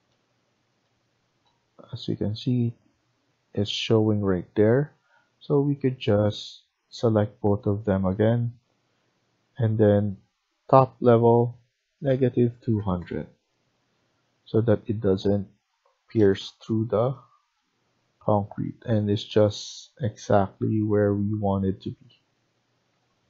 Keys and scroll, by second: 12.1-12.7 typing, 15.8 Escape.